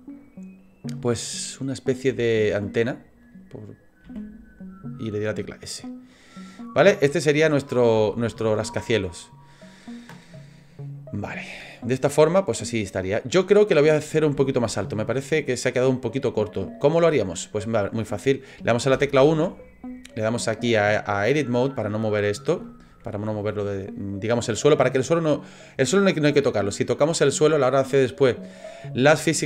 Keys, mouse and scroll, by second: 6.1 middle click, 6.8-7.3 scroll down 4, 7.2 middle click, 8.0 shift+middle click, 8.5 scroll down 1, 8.8 middle click, 10.5 click, 11.8 middle click, 14.1-14.5 scroll up 3, 14.5-15.1 shift+scroll down 4, 15.1 middle click, 17.1 middle click, 18.9 KP_1, 20.5 click, 22.6 shift+middle click.